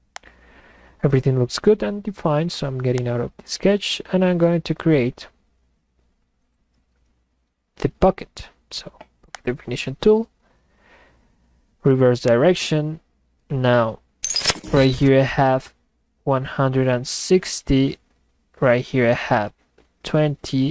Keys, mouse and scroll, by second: 3.0 click, 9.4 click, 12.3 click.